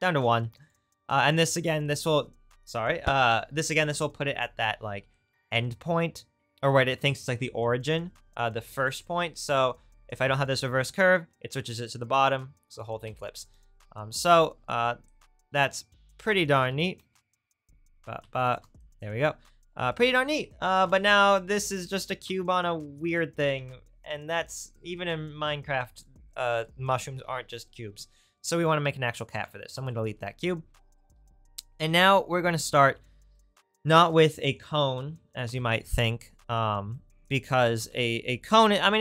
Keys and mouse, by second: 10.8 m, 13.0 m, 16.6 ctrl+z, 17.9 ctrl+z, 18.2 ctrl+z, 29.7 ctrl+x, 31.2 shift+a, 34.4-39.0 drag.